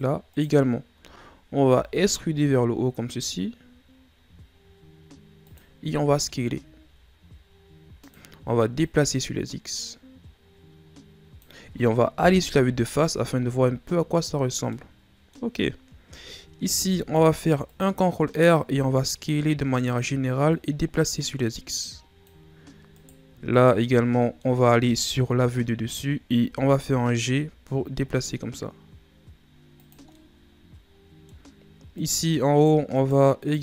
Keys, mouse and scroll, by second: 0.3 shift+right click, 1.7 e, 6.0 s, 8.8 click, 12.2 KP_1, 13.5-13.9 scroll down 1, 13.9-14.7 shift+scroll up 7, 14.7-16.6 middle drag, 16.6 ctrl+r, 18.1-18.5 scroll up 2, 18.6 s, 20.5-22.9 drag, 22.9 right click, 23.5 shift+right click, 24.2 middle click, 25.0 KP_7, 26.5 g, 30.1-31.6 middle drag, 31.6-32.0 scroll up 1, 32.0 right click, 32.6 shift+right click, 32.9 shift+right click, 33.4 shift+right click.